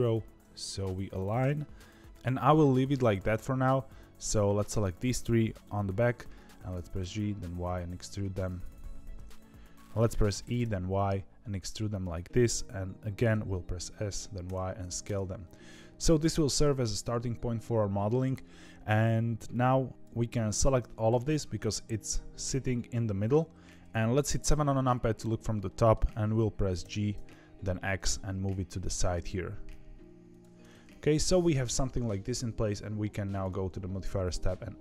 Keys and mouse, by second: 6.7 g, 8.8 ctrl+z, 10.3 e, 13.2 s, 23.8 KP_3, 24.4 KP_7, 25.6 shift+middle click, 26.8 g, 30.5 middle click, 33.3 click, 34.2-34.8 drag.